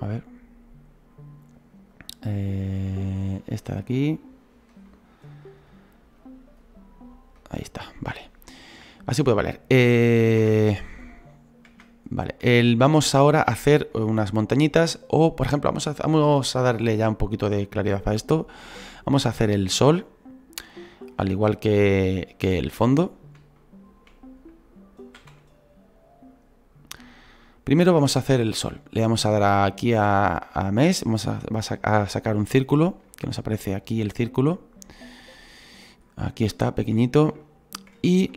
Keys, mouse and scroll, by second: 25.1-32.3 shift+middle drag, 25.1 scroll down 2, 34.8-37.0 middle drag, 37.0-37.4 scroll up 2, 37.4-38.3 shift+middle drag.